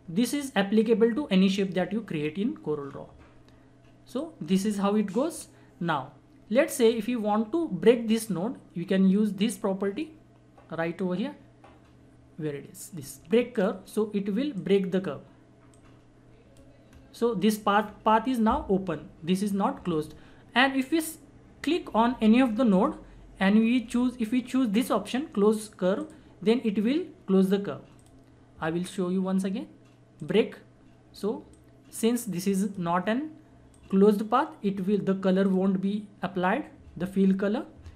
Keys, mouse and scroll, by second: 2.2-2.9 scroll up 1, 4.2-9.4 drag, 13.5-16.9 drag, 16.9-17.8 scroll up 1, 17.8 scroll down 1, 21.6 scroll up 1, 22.7 click, 26.0 click.